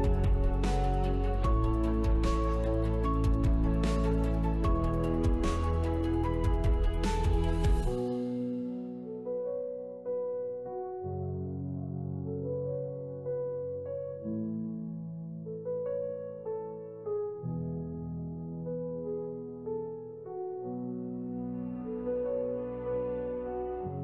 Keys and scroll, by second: 1.5 shift+d, 3.5 Delete, 9.5 shift+d, 12.7 shift+x, 20.3 shift+w, 21.6 Escape, 23.6 shift+w.